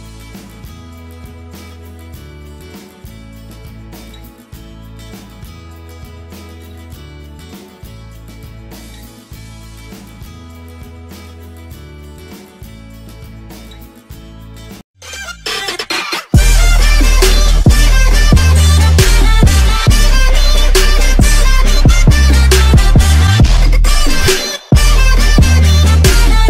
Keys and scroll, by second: 5.9 Left, 13.7 k, 14.3 v.